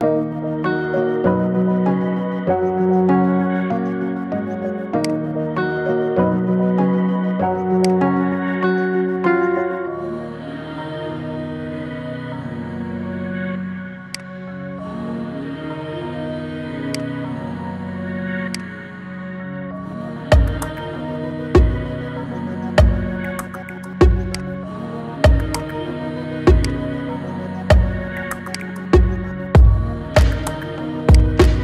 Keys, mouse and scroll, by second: 0.1 KP_1, 1.5 r, 5.2-5.6 scroll up 5, 5.6-6.2 shift+middle drag, 6.2 g, 8.0 scroll up 2, 8.3-8.9 shift+middle drag, 8.9 scroll up 1, 9.8 r, 15.6 g, 17.3 g, 20.3 r, 25.4 click, 28.4 click, 29.0-29.4 scroll up 2, 29.4-30.9 middle drag, 30.9 click, 31.3-31.6 scroll down 4.